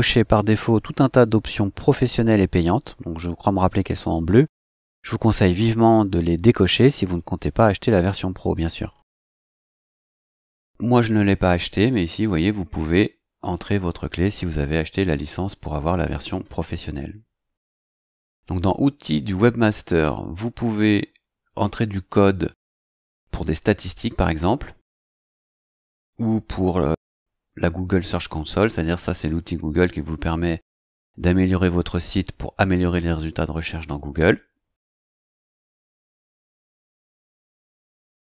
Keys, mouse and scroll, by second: 15.6 click, 16.8-17.6 scroll up 4, 18.5 click, 20.9 scroll down 2, 34.3-34.7 scroll down 2, 35.0-35.3 scroll up 2, 35.3 scroll down 2, 35.8-36.1 scroll up 2, 37.0 click.